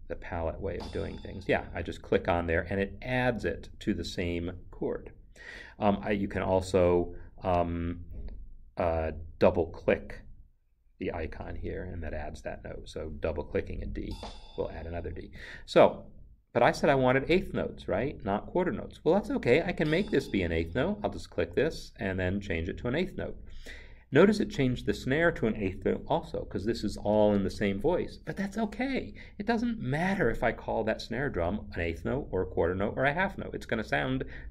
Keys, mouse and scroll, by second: 0.6 click, 14.0 double click, 15.3 Escape, 19.6 Escape.